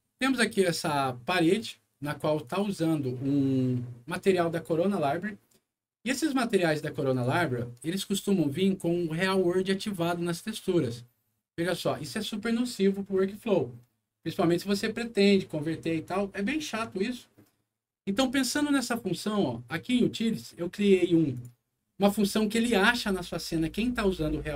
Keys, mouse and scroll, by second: 0.2 click, 1.2 scroll up 1, 2.4 click, 7.1 click, 8.4 middle click, 9.0-9.6 scroll up 2, 9.9 click, 18.4 scroll down 2, 21.3 click, 21.7 scroll down 2, 22.2 scroll up 2.